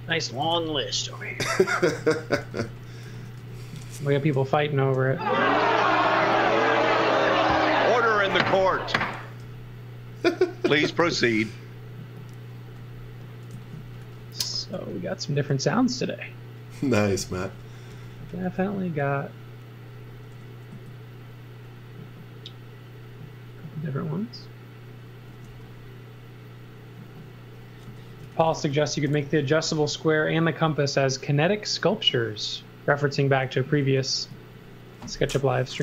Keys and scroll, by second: 0.4 z, 2.1-4.3 typing, 8.0-9.4 typing, 10.7 x, 11.0 v, 12.0 v, 13.5 z, 14.0 x, 14.7 l, 16.8 x, 17.2 v, 17.9 x, 18.4 space, 20.3 s, 25.0-25.9 typing, 27.6-29.4 typing, 34.3 z.